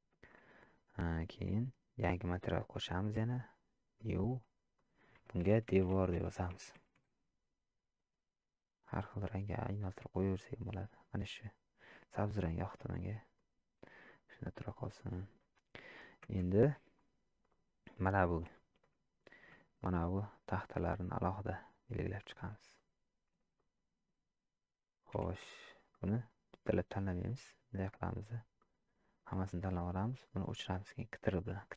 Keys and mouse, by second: 2.0 click, 4.0 click, 4.8-7.5 drag, 12.8-13.4 middle drag, 14.1 middle click, 15.0 middle click, 16.3 Tab, 17.5 click, 18.5 shift+middle click, 18.9 middle click, 22.0 shift+click, 22.7 shift+click, 23.6 middle click, 25.3 shift+z, 25.9 middle click, 27.3 click, 28.6 middle click, 30.1 ctrl+click, 30.8 middle click.